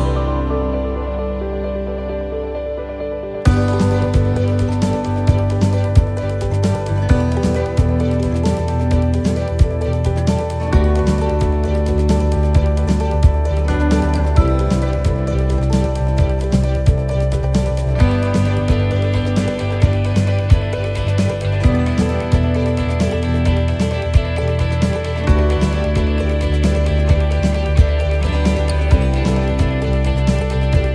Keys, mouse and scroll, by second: 0.6 c, 4.5 shift+middle click, 4.7-5.2 scroll down 2, 5.2 middle click, 6.6 click, 8.9 middle click, 9.8 a, 11.2 s, 17.3 click, 17.3 middle click, 18.9 middle click, 20.1 click, 22.1 middle click, 24.4-24.7 scroll down 2, 24.7 middle click, 27.7-28.2 scroll up 3, 28.1 middle click, 28.6 shift+middle click, 29.2-29.6 scroll up 1, 29.6 middle click.